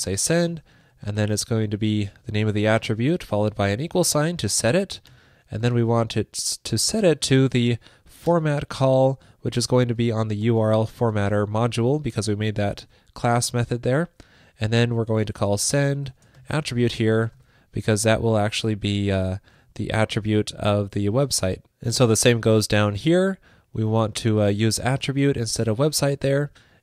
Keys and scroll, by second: 1.8 super+v, 6.9 alt+shift+Right, 7.4 alt+shift+Right, 12.3 alt+Right, 12.8 alt+shift+Left, 15.3 alt+shift+Right, 18.2 super+Right, 25.0 super+v.